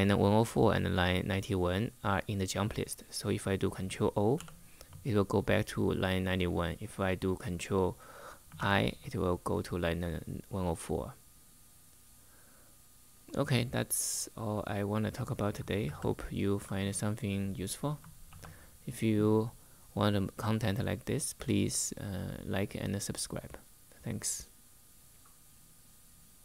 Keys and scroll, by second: 4.1 ctrl+o, 8.3 ctrl+i, 15.5 super+Tab, 18.0 super+2.